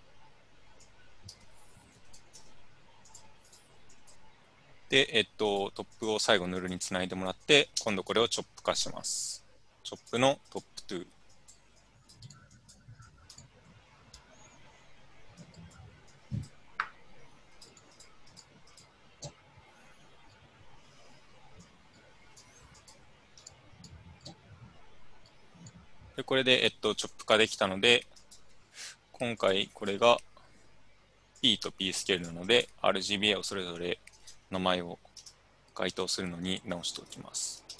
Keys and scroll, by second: 1.3 Tab, 2.0 n, 7.8 Tab, 35.2-37.7 typing.